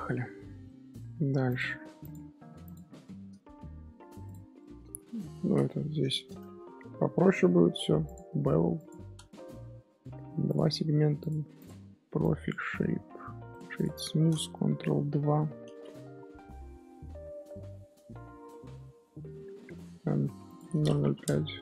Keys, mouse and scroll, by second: 0.6-1.0 middle drag, 1.4 click, 2.0 click, 2.5 x, 3.0-4.2 shift+middle drag, 4.2 click, 4.6-5.2 middle drag, 5.2 shift+h, 5.4-5.8 middle drag, 5.8 Tab, 6.0 shift+middle click, 6.4 Tab, 6.6-8.0 middle drag, 8.9-9.6 drag, 9.6-10.2 scroll down 1, 10.2 scroll down 1, 10.4-11.9 drag, 11.9 scroll up 1, 12.2-13.5 drag, 13.5 right click, 15.4 scroll down 1, 16.1-16.7 scroll down 9, 16.7-17.4 scroll down 1, 17.4 scroll up 1, 17.5-19.7 middle drag, 19.7-20.4 scroll down 1, 20.4-21.6 drag.